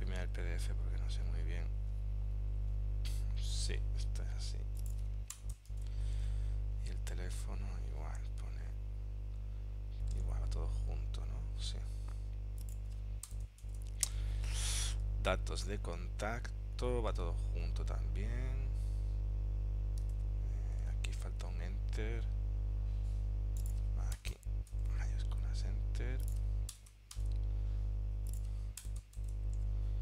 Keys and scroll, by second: 1.2 super+Tab, 3.6 super+Tab, 5.8 shift+Return, 6.3 super+Tab, 10.3 super+Tab, 13.7 shift+Return, 15.1 super+Tab, 17.2 super+Tab, 21.0 super+Tab, 22.3 super+Tab, 24.8 shift+Return, 27.3 shift+Return, 29.3 shift+Return, 29.7 super+Tab.